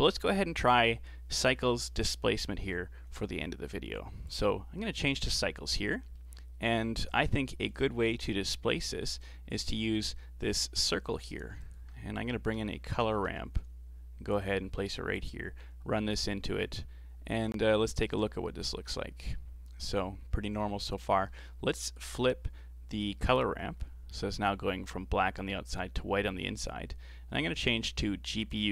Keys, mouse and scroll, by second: 4.2-6.2 drag, 6.2 middle click, 7.0 click, 8.1-8.6 scroll up 4, 8.6 middle click, 9.2-10.0 scroll up 1, 10.0 ctrl+shift+click, 10.9-11.5 scroll down 4, 11.5 shift+a, 13.1 r, 15.1 click, 16.7 scroll up 5, 16.9 scroll down 1, 17.2-18.0 scroll up 4, 18.0 ctrl+shift+click, 18.5-18.9 scroll down 5, 18.9 middle click, 19.9-20.8 scroll up 9, 21.0 scroll up 1, 21.3 middle click, 22.1-23.8 drag, 23.8-25.9 scroll down 8, 27.6-28.7 drag.